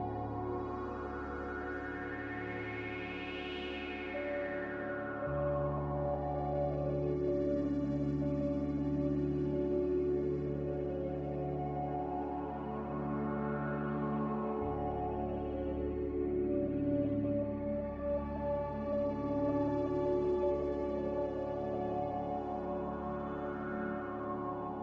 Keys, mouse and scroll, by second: 13.7 z.